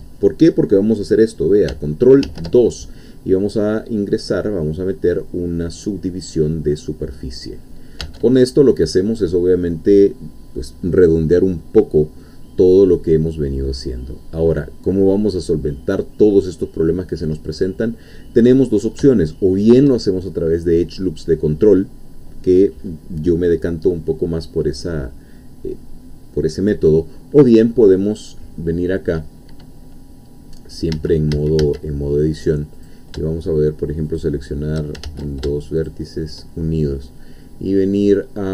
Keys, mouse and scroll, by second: 2.2 ctrl+2, 3.1-8.1 middle drag, 8.1 Tab, 8.4-9.9 scroll up 2, 9.9-11.7 scroll up 1, 11.7-12.1 scroll down 1, 12.2-16.0 middle drag, 17.5 middle click, 18.4-19.0 scroll up 1, 19.2-20.4 shift+middle drag, 30.9 a, 32.9 click, 34.2 shift+click, 35.1 ctrl+shift+z, 35.9 shift+click.